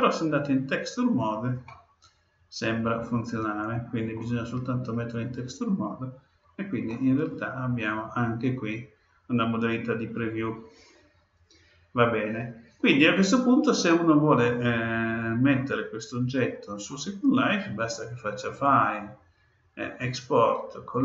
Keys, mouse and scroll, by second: 1.6-3.5 middle drag, 5.8-6.8 scroll up 1, 6.8-8.7 middle drag, 13.9-17.4 middle drag, 18.5-20.3 drag.